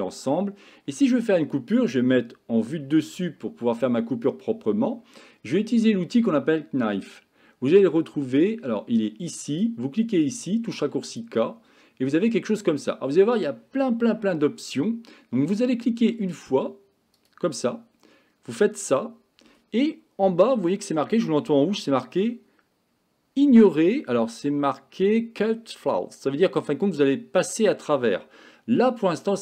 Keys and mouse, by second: 2.2 KP_7, 9.8-11.3 drag, 17.2-29.4 drag.